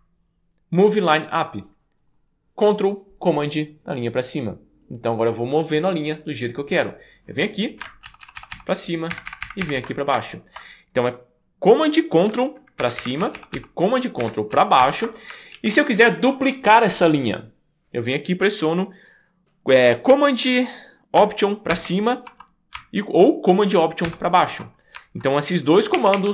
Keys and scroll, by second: 8.1 ctrl+super+Down, 9.1 ctrl+super+Up, 12.8 ctrl+super+Up, 13.2 ctrl+super+Down, 14.2 ctrl+super+Up, 14.5 ctrl+super+Down, 14.8 ctrl+super+Up, 15.5 super+s, 21.8 alt+super+Up, 24.1 alt+super+Down, 25.9 d, 26.2 d.